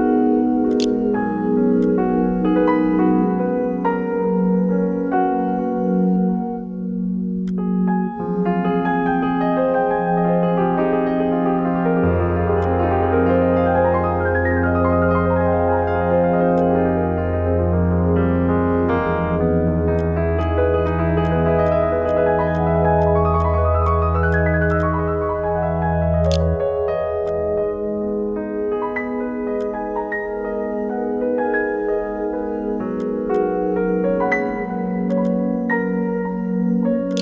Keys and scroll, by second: 0.0-0.6 typing, 26.0 ctrl+e, 26.5 2, 36.2-37.0 typing.